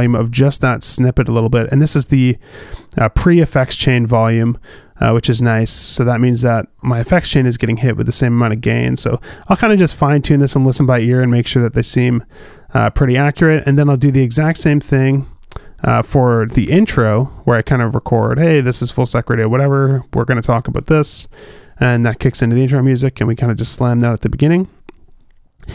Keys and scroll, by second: 17.3 super+z.